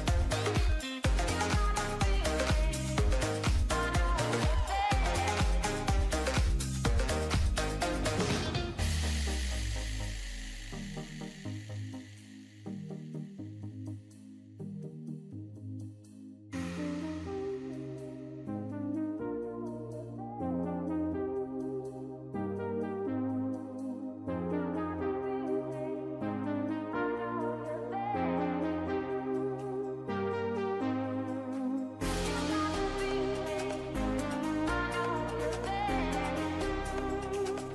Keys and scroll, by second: 0.3 ctrl+shift+z, 5.0 ctrl+=, 8.2 ctrl+=, 10.9 ctrl+i, 19.4 ctrl+z.